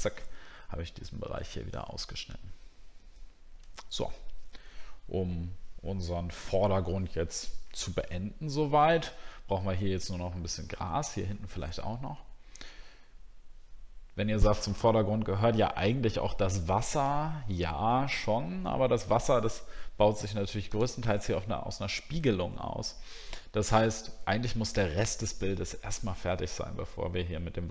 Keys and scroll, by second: 1.7 alt+scroll down 1.